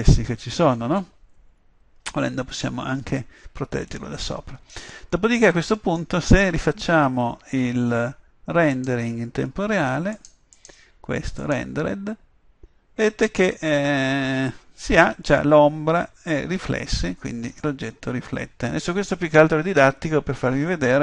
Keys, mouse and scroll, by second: 4.0 middle click, 5.5 middle click, 8.8 click, 11.7 click.